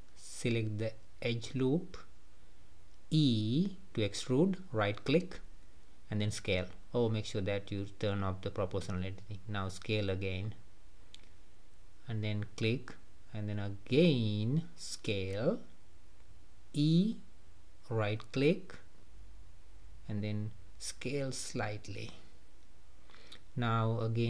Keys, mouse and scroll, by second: 0.6 alt+click, 3.1 e, 5.1 s, 8.0 click, 9.6 s, 12.8 middle click, 13.4-13.9 scroll up 2, 17.3 e, 18.9 s, 22.4 e.